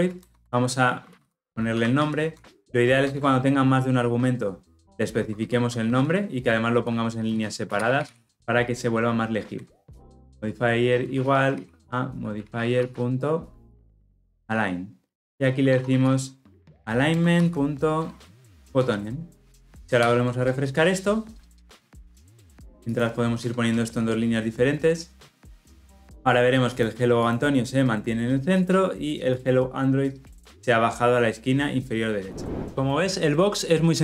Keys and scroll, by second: 0.1 alt+Return, 10.0 Return, 15.1 Return, 18.6 ctrl+z, 18.7 Return, 19.7 ctrl+alt+o, 23.7 alt+Return.